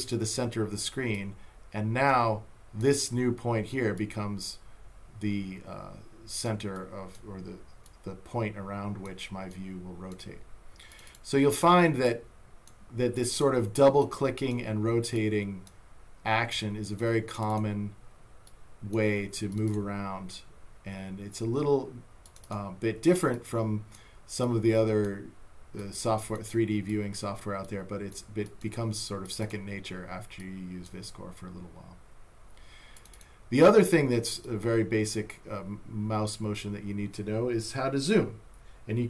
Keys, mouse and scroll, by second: 1.2 click, 4.0 click, 6.8 click, 7.9 click, 9.5 click, 10.9 click, 13.2 click, 15.2 click, 16.5 click, 22.2 click, 24.4 click, 25.8 click, 26.9 click, 33.0 click, 34.4 click.